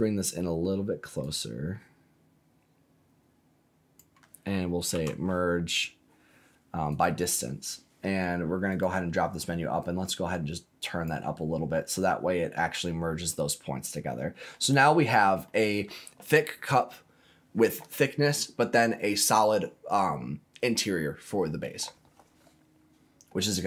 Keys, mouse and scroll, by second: 1.2-3.9 drag, 4.9 m, 8.6 click, 9.7-11.2 drag, 11.5-11.9 scroll down 2, 11.9-14.5 middle drag, 14.9 scroll down 2, 15.4 middle click, 23.5 click.